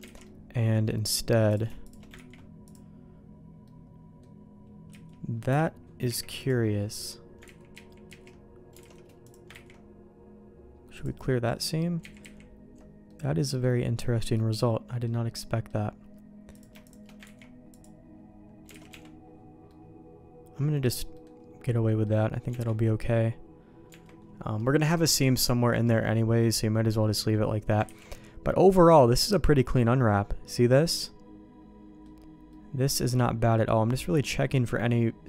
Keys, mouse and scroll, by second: 0.1 alt+a, 0.2 middle click, 1.4 click, 1.8 shift+click, 2.1 ctrl+e, 3.6 middle click, 3.9 click, 4.9 a, 5.5 y, 6.0 u, 7.4 ctrl+z, 7.7 ctrl+z, 8.0 ctrl+z, 8.8 alt+a, 9.2 click, 9.6 ctrl+e, 12.0 ctrl+z, 12.2 ctrl+z, 13.0 middle click, 14.3 middle click, 15.3 middle click, 16.5 click, 16.8 shift+click, 17.2 ctrl+e, 18.7 alt+a, 18.9 Tab, 19.6-20.9 middle drag, 21.1 middle click, 21.8 middle click, 22.5 Tab, 23.8 Tab, 24.5 middle click, 25.8 middle click, 26.6 middle click, 27.1 middle click, 27.9 ctrl+s, 28.5 middle click, 29.3-32.0 middle drag, 32.5-35.2 middle drag.